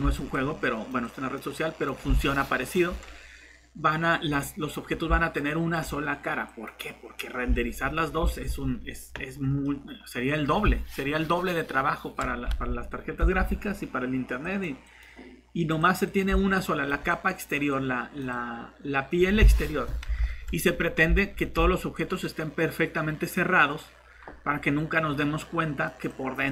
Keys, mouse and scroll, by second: 0.3 click, 0.7 typing, 3.7 scroll up 1, 4.9 scroll down 1, 5.3 click, 7.6 alt+Tab, 8.4 Tab, 9.6 middle click, 12.5 alt+Tab, 13.4 Tab, 14.4 click, 18.6 alt+Tab, 20.3 alt+Tab, 20.7 scroll down 1, 21.4 scroll up 1, 21.9 click, 22.2 typing, 25.9-26.5 typing.